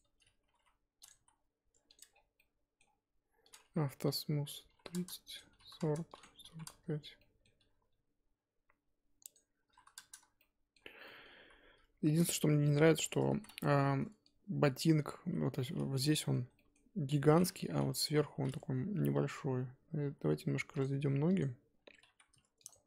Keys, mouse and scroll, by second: 0.5 g, 1.1 s, 2.0 Tab, 2.1 scroll down 4, 2.3-4.9 middle drag, 4.9-7.1 drag, 7.1 scroll down 1, 7.2-9.9 middle drag, 9.9 click, 10.4 middle click, 11.0 scroll down 1, 11.0 middle click, 11.3 KP_1, 11.8-12.7 scroll up 2, 12.7 shift+click, 13.1 Tab, 13.4 z, 13.5 1, 14.8 click, 15.3 z, 16.0-18.0 middle drag, 18.0 KP_1, 19.0 g, 21.0 Tab, 21.4 click, 21.8 Tab, 22.0 3, 22.7 alt+click.